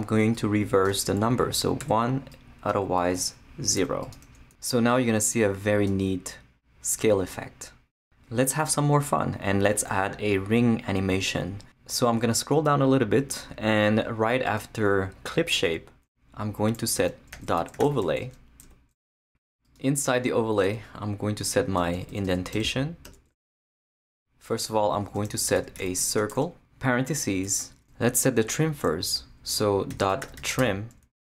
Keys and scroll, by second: 1.8 |, 3.8 0, 15.5 Return, 16.7-18.7 typing, 20.6 Return, 21.8 BackSpace, 22.5 Return, 24.1 Tab, 25.0-26.8 typing, 29.9-31.1 typing.